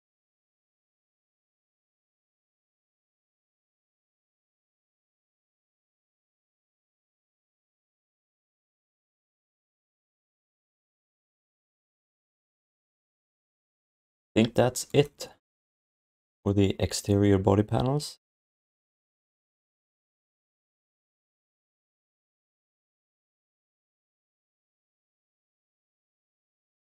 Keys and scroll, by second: 3.2 q, 8.8 alt+shift+d, 9.4 ctrl+s, 12.6 ctrl+s.